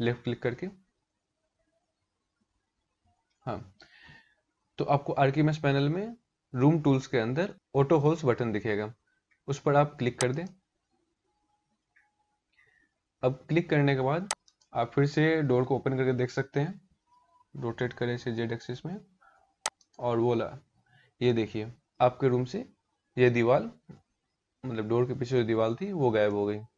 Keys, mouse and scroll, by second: 0.8 scroll down 6, 1.7-2.9 scroll down 1, 9.8 click, 11.6-12.0 scroll up 1, 12.2-12.6 scroll down 1, 14.0 click, 16.7 r, 20.2-20.6 scroll up 3, 20.8 middle click, 21.8 middle click, 21.8 scroll up 1, 25.8 middle click.